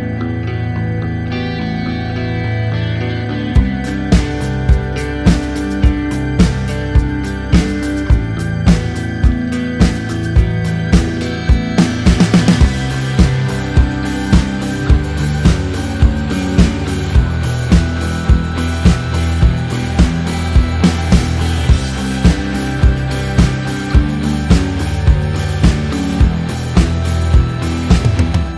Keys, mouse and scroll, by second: 1.4 click, 1.9 click, 2.0 Delete, 3.8 o, 5.1 click, 7.4 v, 7.4 click, 9.3 a, 9.8 click, 11.0 d, 12.6 click, 13.2-14.3 typing, 14.4 KP_Enter, 15.6 click, 16.0 ctrl+t, 17.2 click, 20.8 Return, 22.7 p, 25.3 click.